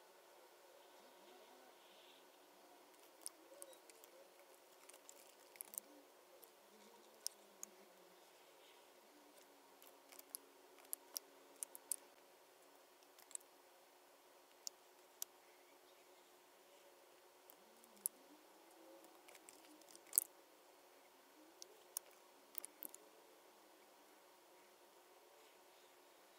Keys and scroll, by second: 3.5 super+9, 3.6 super+F9, 4.1 Right, 10.8 super+5, 11.5 super+F9, 12.7 Left, 13.2 BackSpace, 13.3 1, 14.6 space, 17.9 super+9, 18.0 super+F9.